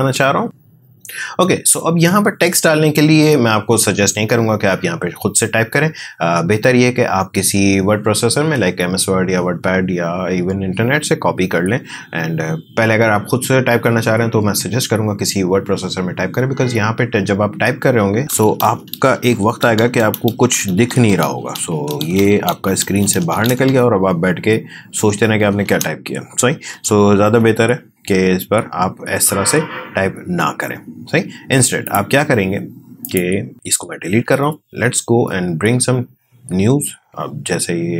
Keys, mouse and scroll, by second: 18.0-26.9 typing, 27.2 Delete, 29.3 Escape, 31.8 click, 33.5 Delete, 34.3 alt+Tab.